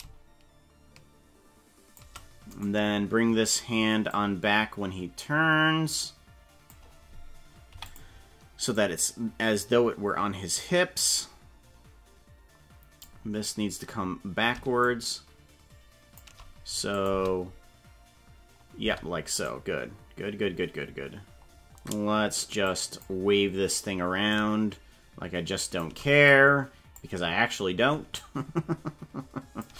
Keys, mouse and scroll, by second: 0.0-2.0 shift+drag, 2.7 right click, 4.1-6.7 drag, 8.8-13.1 drag, 14.8-16.3 shift+drag, 17.0 click, 17.1 space, 18.9 space, 19.5 right click, 22.7 click, 24.3-25.9 shift+drag, 26.3 click, 28.2-29.7 shift+drag.